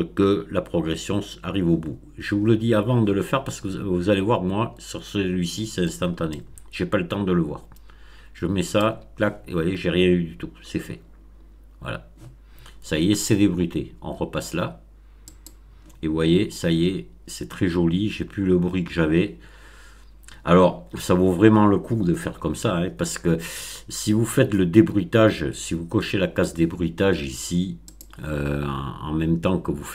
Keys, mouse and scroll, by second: 6.3-8.9 drag, 15.2 click, 27.8 click.